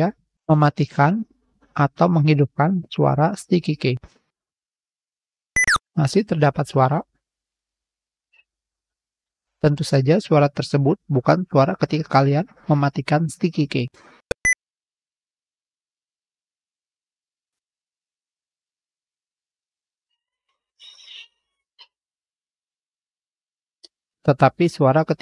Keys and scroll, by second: 4.3 l, 22.2-23.0 typing, 24.0 ctrl+v, 24.1 ctrl+shift+f.